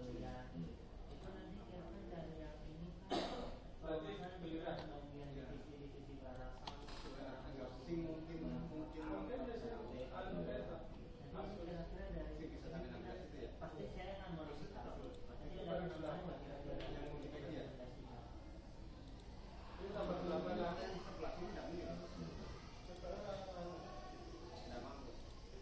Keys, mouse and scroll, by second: 2.9 middle click, 3.3 click, 5.4-8.0 middle drag, 9.1 click, 15.3 click, 17.3-18.3 drag, 21.0 click, 23.0 click, 25.3-25.6 drag.